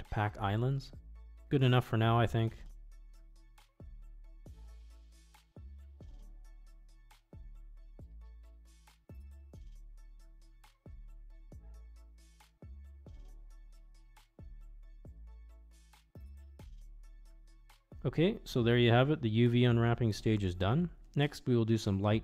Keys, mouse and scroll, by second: 1.8 a, 4.1 Tab, 5.9 a, 7.3-8.9 middle drag, 9.1 ctrl+z, 9.5-13.0 drag, 15.5-17.6 middle drag, 17.6 Tab.